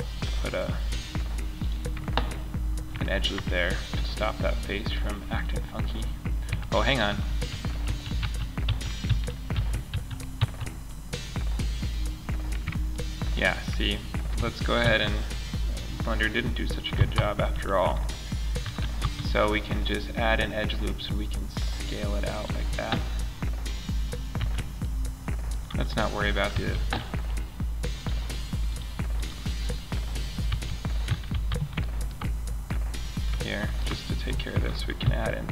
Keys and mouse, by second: 1.1 click, 2.0 middle click, 6.4 ctrl+z, 6.8 ctrl+z, 7.2 ctrl+z, 7.6 ctrl+z, 8.0 ctrl+z, 8.4 ctrl+z, 8.9 ctrl+z, 9.3 ctrl+z, 9.7 ctrl+z, 14.2 ctrl+r, 18.0 s, 21.9 click, 23.7 a, 25.9 a, 29.8 a, 30.4 a, 30.8 a, 31.2-32.1 middle drag, 32.6 middle click, 32.8 middle click, 34.4 ctrl+r.